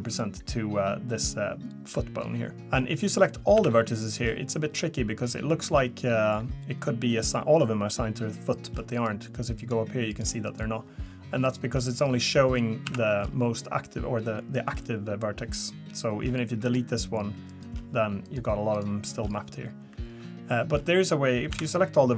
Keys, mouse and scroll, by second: 2.5-3.6 scroll down 2, 3.6 a, 8.9 click, 9.6 click, 10.1 click, 10.5 click, 11.4 click, 12.8 a, 16.6 click, 17.5 click, 18.2 click, 18.7 click, 21.5 a.